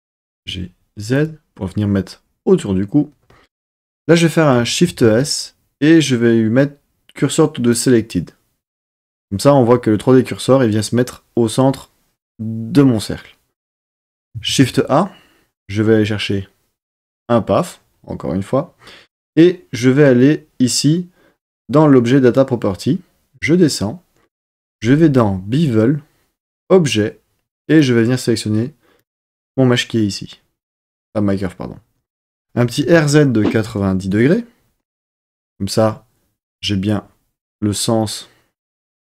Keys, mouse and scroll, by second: 0.2 g, 0.4 z, 1.1 click, 4.8 shift+s, 14.4 shift+a, 26.4 click, 27.6 click, 32.5 r, 32.8 z, 33.5 KP_9, 33.7 KP_0, 34.0 KP_Enter.